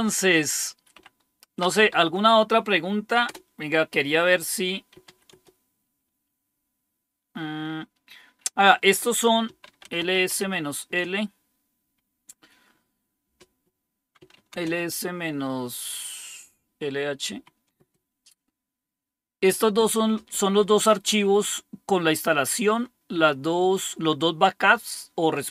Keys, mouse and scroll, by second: 0.9-2.3 typing, 3.2 Return, 4.6-5.9 typing, 9.1-10.8 typing, 13.9-15.4 typing, 17.2-17.7 typing, 21.0-24.4 drag.